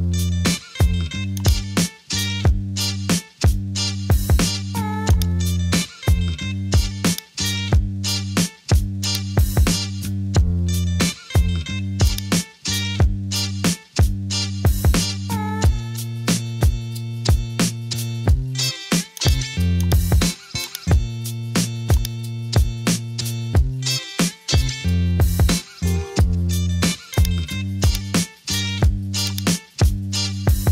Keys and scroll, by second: 2.8 super+t, 14.1 Return.